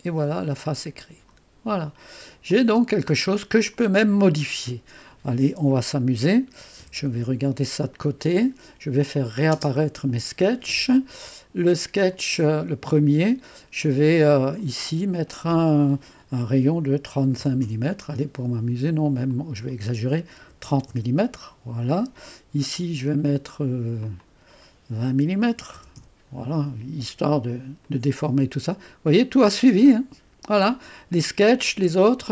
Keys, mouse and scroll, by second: 1.0 click, 1.8-2.4 scroll down 2, 2.5-4.3 drag, 6.9-7.6 typing, 9.2 click, 9.6 typing, 11.2 click, 12.2-13.2 drag, 14.4 click, 17.1 typing, 17.6 Return, 18.5-21.4 typing, 19.1 click, 24.0-25.3 drag, 25.3-26.3 typing, 27.6-28.3 typing, 27.8 click, 29.2-31.6 drag.